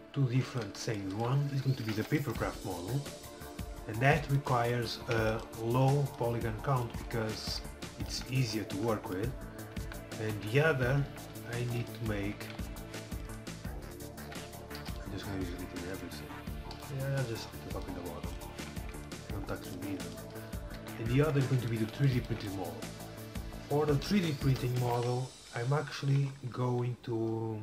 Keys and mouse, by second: 0.3 ctrl+r, 1.8 a, 2.1 c, 2.9-4.6 drag, 4.1 ctrl+r, 5.1 a, 5.2 c, 5.7-7.1 drag, 7.5 click, 7.7 z, 9.9 KP_1, 10.3 z, 11.1 a, 11.5 ctrl+r, 12.4 a, 12.6 c, 14.3 a, 14.9 c, 16.1-17.9 middle drag, 16.6 a, 16.8 c, 19.4 x, 20.8 KP_7, 24.8 KP_7, 25.6 a.